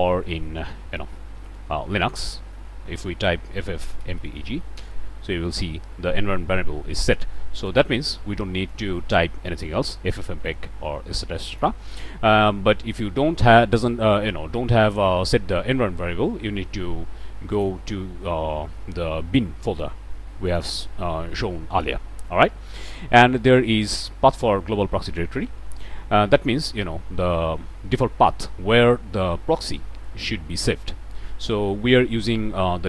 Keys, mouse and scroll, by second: 1.3 ctrl+alt+t, 2.3 click, 3.5-4.4 typing, 4.7 Return, 6.1-6.6 scroll up 2, 7.6 click, 8.7 click, 11.4 click, 17.5 click, 20.4 click.